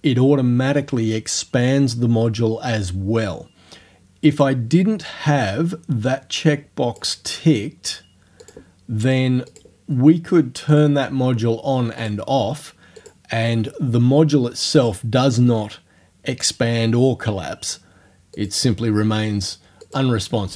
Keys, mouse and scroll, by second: 4.4 click, 6.1-7.2 drag, 8.4 click, 9.5 click, 10.8 click, 12.0 click, 13.0 click, 18.4 click, 19.8 click.